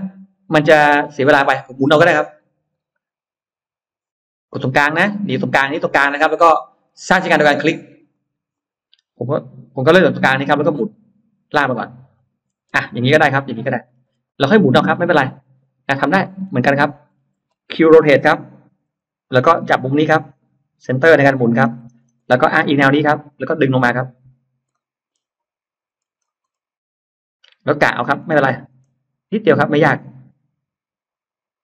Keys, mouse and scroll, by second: 0.1-0.4 scroll down 1, 4.6 click, 8.0 click, 9.9 click, 10.2 middle click, 12.0 click, 12.7 space, 13.0-13.3 scroll up 1, 13.4 middle click, 14.1 click, 14.1 space, 14.8 scroll down 1, 15.0 middle click, 15.8 scroll down 1, 16.2-17.5 scroll up 3, 18.0-18.6 scroll up 4, 18.8 q, 21.1 click, 21.4-22.5 scroll down 3, 23.2 click, 24.6 middle click, 24.6 scroll up 1, 25.8-26.7 scroll up 1, 27.8-28.2 scroll up 1, 28.2 middle click.